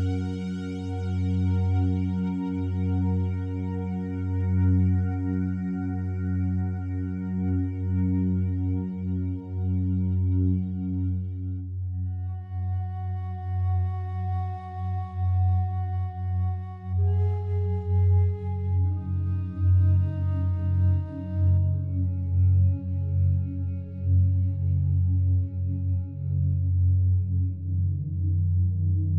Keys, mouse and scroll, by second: 9.1 shift+a, 11.1 click, 20.2 Return, 21.7 click, 23.5 r, 23.9 u.